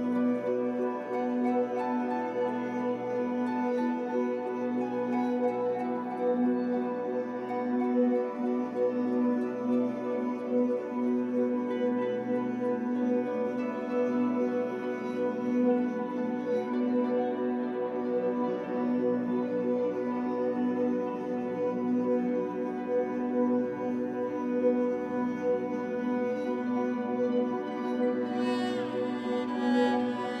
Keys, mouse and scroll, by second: 2.0 KP_1, 3.3 shift+d, 4.8 click, 4.9 middle click, 5.8 click, 7.6 KP_1, 8.6 click, 10.5 click, 12.8 e, 14.2 right click, 14.7 click, 17.0-18.1 shift+drag, 18.1 e, 19.0 click, 21.1-21.9 scroll down 1, 22.2-25.8 drag, 25.8 e, 28.3 click, 29.3-30.4 shift+drag.